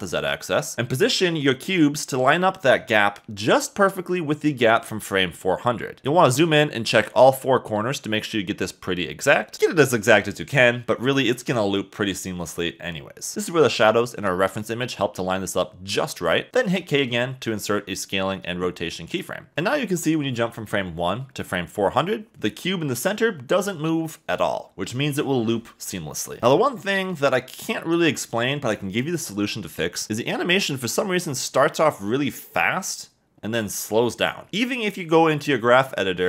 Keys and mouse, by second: 2.1 click, 2.8 shift+middle click, 4.8 g, 7.5 g, 7.9 shift+z, 10.0 Escape, 11.9 shift+middle click, 16.7 k, 18.5 click, 19.8 click, 21.7 click.